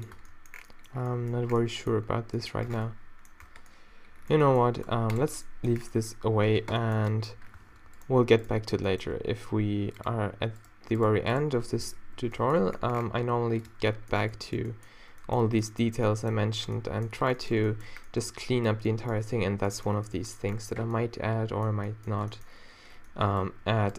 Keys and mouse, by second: 0.2 Tab, 2.7 Tab, 3.4 Tab, 4.9 x, 7.6 Tab, 8.3 Tab, 10.0-11.4 middle drag, 12.1 o, 12.7 g, 13.7 Tab, 13.7 click, 14.0 middle click, 15.9 a, 23.5 Tab.